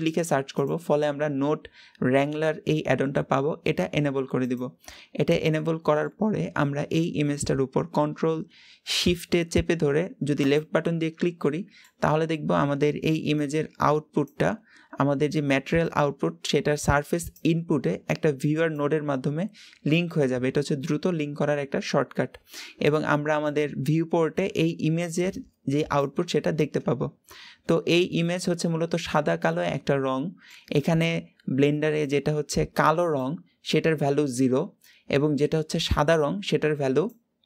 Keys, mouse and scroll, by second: 10.3 ctrl+shift+click, 11.3-37.4 middle drag.